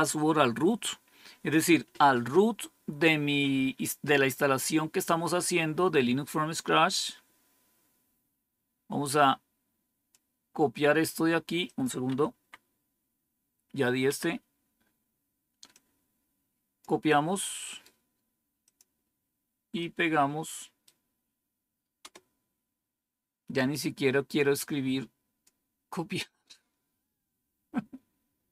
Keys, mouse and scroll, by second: 6.1-10.0 scroll up 3, 10.0 click, 11.5 click, 12.2 Up, 14.0 Down, 15.6-16.7 drag, 17.5 right click, 18.5 click, 19.6 right click, 21.9 Return, 24.3-25.4 drag, 26.1 right click.